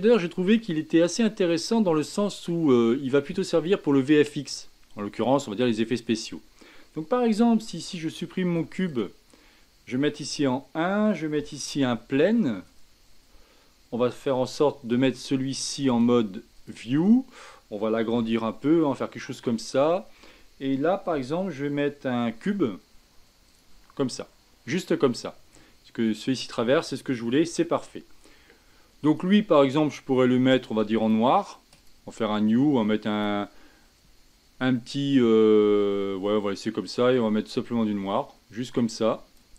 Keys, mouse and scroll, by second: 0.9-4.1 scroll up 4, 5.4-8.4 middle drag, 8.5 x, 10.2 KP_1, 11.7 shift+a, 14.9 click, 15.9-18.1 drag, 18.1 s, 22.3 shift+a, 25.5-27.4 middle drag, 27.4 KP_1, 29.1 click, 31.0 click, 31.8-36.1 drag, 36.8 click.